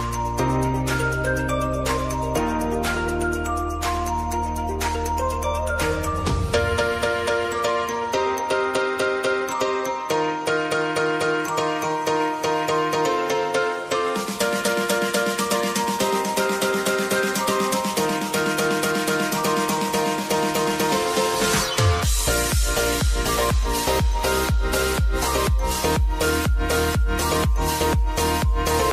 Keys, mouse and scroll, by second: 0.1 click, 1.2 space, 2.3 ctrl+z, 3.1 space, 5.6 click, 6.2 space, 8.6 click, 11.5 p, 12.7 alt+click, 14.7 ctrl+z, 16.0 click, 16.9 typing, 18.4-20.4 drag, 20.4 Left, 22.3 click, 22.8 Up, 25.1 click, 26.8 ctrl+c, 27.0 ctrl+v, 28.1 click, 28.6 space.